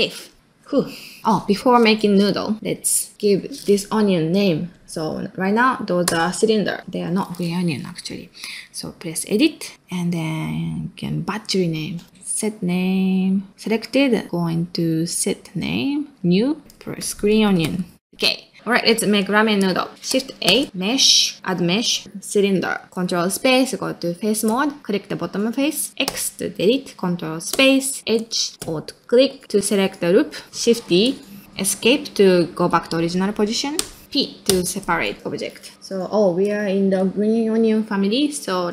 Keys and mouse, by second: 0.3-1.2 ctrl+middle drag, 1.2-2.6 drag, 2.7 ctrl+middle click, 3.1-6.8 drag, 9.6-19.3 drag, 19.3 middle click, 19.8 middle click, 20.4 shift+a, 22.7 middle click, 23.2 ctrl+space, 24.8 middle click, 25.0 click, 26.0 x, 27.5 ctrl+space, 29.0 alt+click, 29.4 middle click, 34.0 middle click, 34.5 p.